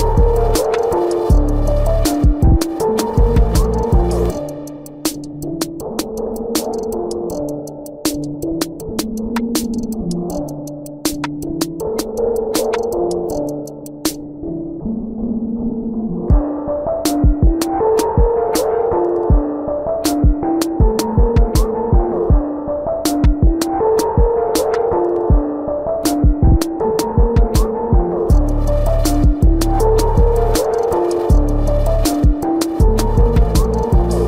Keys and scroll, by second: 1.6 ctrl+-, 5.5 ctrl+alt+z, 11.6 space, 13.2 space, 18.0 space, 22.7 space, 24.4 space, 25.1 ctrl+alt+z, 26.3 space, 27.1 ctrl+-, 27.4 ctrl+alt+z, 27.8 ctrl+-, 28.4 ctrl+-, 29.6 ctrl+-, 33.3 space, 33.9 ctrl+=.